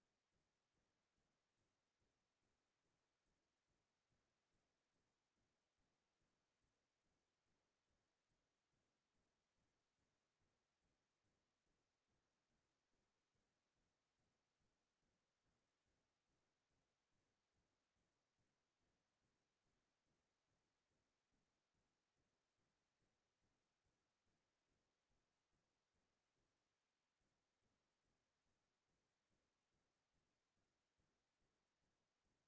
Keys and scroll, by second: 10.4-15.0 typing, 16.4 s, 16.7 t, 23.1 space, 23.2 Left, 24.6-26.6 typing.